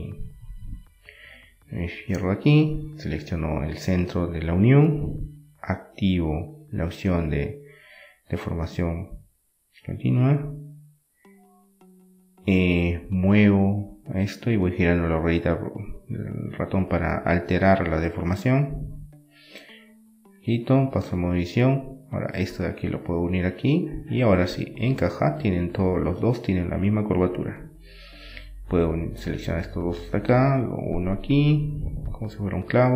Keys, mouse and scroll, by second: 0.2-1.8 drag, 1.8 middle click, 2.4-4.1 drag, 9.5-10.9 drag, 10.9 middle click, 12.6-14.4 drag, 14.2-17.2 right drag, 15.5-17.2 drag, 17.2 middle click, 19.9-23.2 right drag, 22.4 click, 23.2-24.4 drag, 25.2-26.8 drag, 26.4 right click, 26.8-28.1 middle drag, 28.1-30.2 drag, 29.9 right click, 31.2-32.8 right drag, 32.2 KP_7.